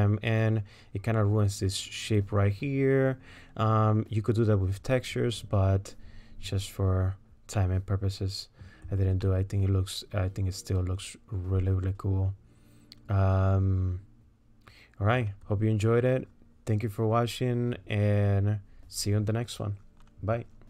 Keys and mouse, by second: 7.6-8.6 middle drag, 9.3-12.1 drag, 9.3-12.1 right drag, 12.1-15.2 middle drag.